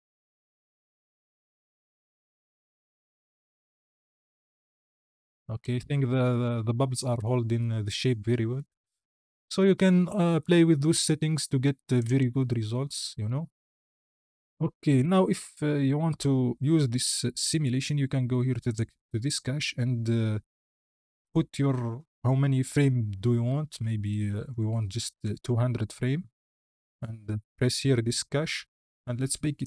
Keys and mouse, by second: 11.8 click, 14.0 space, 14.8 click, 15.7-16.0 drag, 25.4 KP_0.